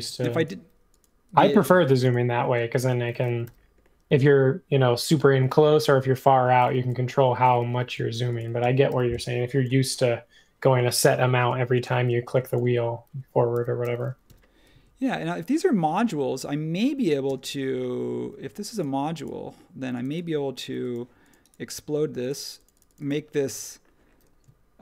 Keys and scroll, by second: 2.6 space, 3.4 h, 6.8 h, 7.7 b, 8.6 space, 9.9 typing, 11.4 space, 13.5 super+g, 14.2 m, 17.2 space.